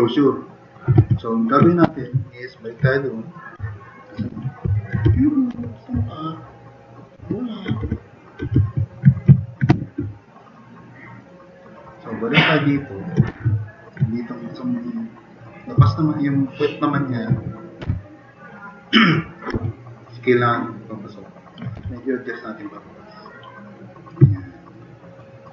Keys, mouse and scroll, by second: 1.0 alt+q, 1.9 s, 3.8 drag, 4.3-7.8 typing, 6.1-6.7 drag, 8.6 alt+q, 9.7 s, 10.1 click, 11.1 click, 12.7-13.1 drag, 13.3 2, 13.6 click, 15.3 click, 15.9 click, 16.6-17.0 drag, 17.8 t, 19.8-21.5 drag, 21.8 e, 22.8-24.0 drag, 24.3 middle drag, 25.2 click.